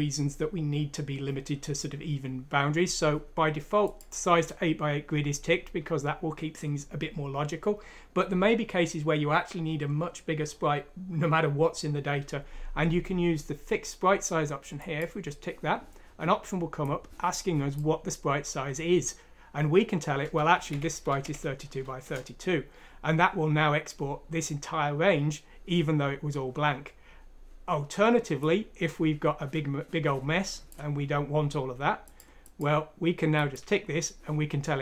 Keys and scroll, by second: 20.3-21.7 typing, 22.0 Return.